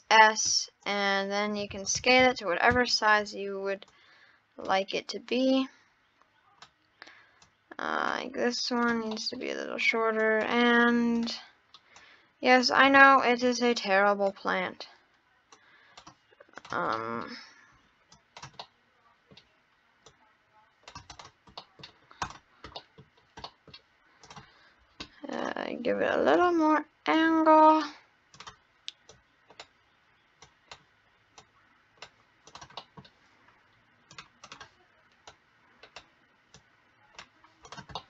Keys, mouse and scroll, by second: 0.5-0.8 scroll up 3, 0.8 click, 1.2 scroll down 2, 1.7 ctrl+z, 2.0 ctrl+z, 2.2 ctrl+z, 2.8 ctrl+z, 3.8 click, 5.3 click, 7.4 click, 8.8-9.2 drag, 9.2-10.2 middle drag, 10.2 click, 11.2-12.0 drag, 13.0 ctrl+z, 13.5 click, 15.5 click, 16.6 click, 16.9-18.1 middle drag, 18.1 click, 18.6-20.0 middle drag, 20.0 click, 21.1 drag, 21.6 middle click, 21.8 scroll down 2, 22.2 click, 22.8 middle click, 23.1 scroll up 3, 23.5-24.2 middle drag, 24.2 click, 25.3-27.2 drag, 28.4 click, 30.4 click, 31.4 click, 32.5 click, 32.8-34.1 middle drag, 34.1-35.3 drag, 36.6 click, 37.6 click, 37.9 middle click.